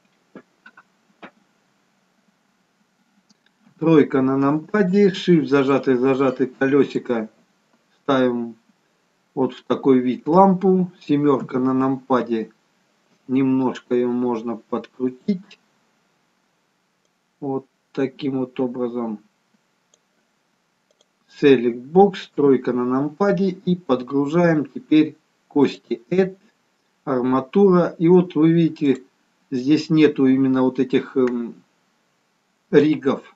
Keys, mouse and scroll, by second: 3.6 KP_3, 5.7 shift+middle click, 9.4-11.5 scroll up 1, 11.5 KP_7, 14.9 click, 17.1 click, 21.0 click, 22.4 KP_3, 25.7 click.